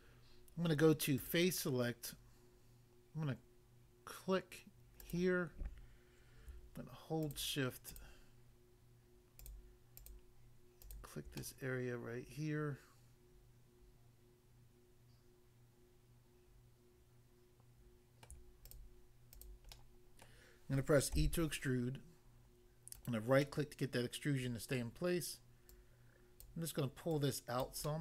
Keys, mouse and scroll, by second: 1.1 click, 5.0 click, 7.3 shift+click, 9.4 shift+click, 10.0 shift+click, 10.8 shift+click, 11.4 middle click, 18.2 middle click, 18.6 shift+click, 19.4 shift+click, 19.7 middle click, 20.2 middle click, 21.1 e, 23.0 right click, 23.1 right click, 23.4 middle click, 24.8 middle click, 25.7 click, 26.5 click, 27.2 click, 27.6 click, 27.9 middle click.